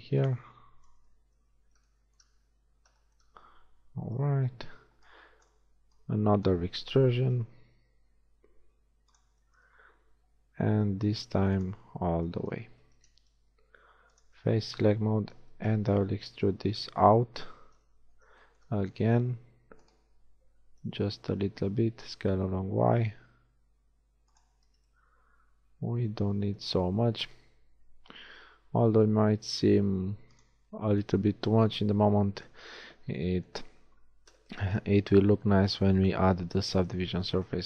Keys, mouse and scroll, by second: 1.1 KP_1, 1.6 z, 4.4 a, 4.6 a, 5.0 b, 5.6 b, 7.4 e, 10.0 e, 13.4 ctrl+Tab, 14.4 a, 15.5 b, 17.8 KP_3, 19.5 e, 20.7 s, 24.7 z, 28.3 s, 32.5 KP_1, 34.2 z, 37.4 a.